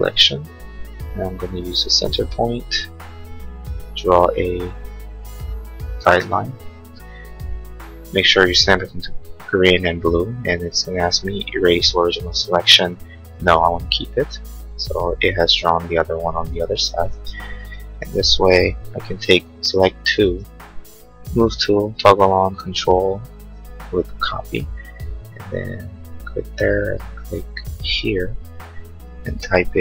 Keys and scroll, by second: 20.2 m.